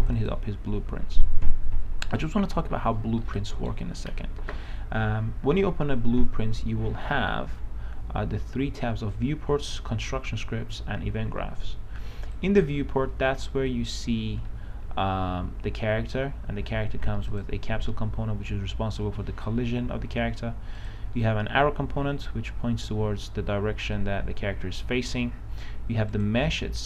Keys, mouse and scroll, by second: 3.4 right click, 4.4-7.3 scroll down 1, 12.6-13.9 drag, 14.3-16.7 right drag, 17.7 click, 24.1 right click, 25.1 w, 26.3 click.